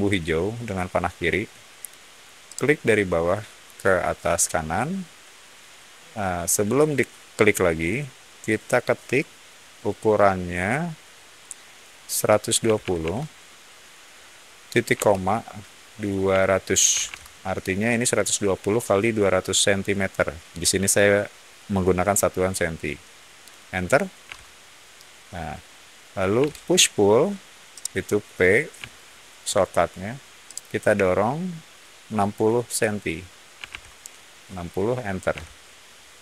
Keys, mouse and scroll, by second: 2.4 click, 12.3-13.4 typing, 14.9 ;, 16.2-17.0 typing, 24.2 Return, 26.3 p, 27.6 middle click, 28.8 shift+middle click, 30.4 shift+click, 33.2-34.1 typing, 35.2 Return.